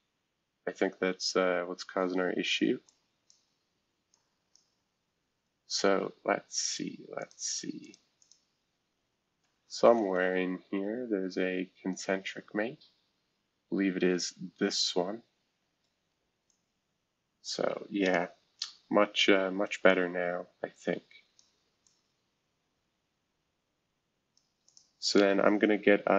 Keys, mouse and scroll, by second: 0.1 scroll down 3, 1.0 scroll down 3, 2.9 click, 4.1 click, 6.6 click, 7.2 click, 7.8 click, 8.2 click, 10.0 Up, 10.2-13.1 Up, 13.1 Down, 14.6 Delete, 16.5-18.1 drag, 18.5 scroll down 1, 19.0 scroll up 1, 19.9-21.4 drag, 21.8-24.4 drag, 24.7 click.